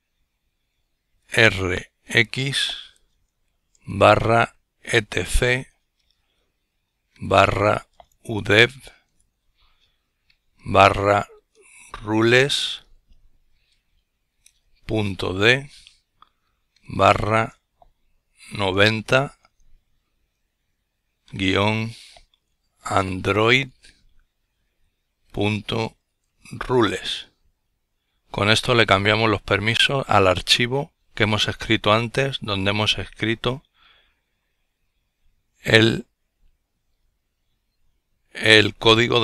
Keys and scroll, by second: 0.6-1.6 typing, 3.0-4.6 typing, 6.4-8.3 typing, 9.9-12.5 typing, 14.1 typing, 16.0 typing, 17.9-18.3 typing, 20.4-26.4 typing, 38.9 ctrl+l.